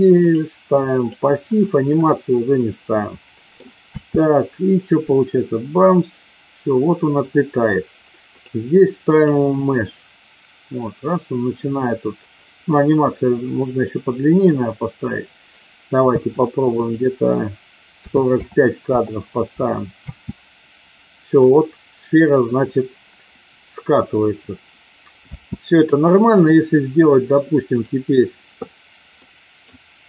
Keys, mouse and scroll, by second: 0.2 click, 2.6-3.7 middle drag, 3.8 space, 8.2-9.3 drag, 13.3 middle click, 16.1 space, 16.8-19.2 drag, 19.9 space, 25.2 space, 27.7 click, 29.2 middle click.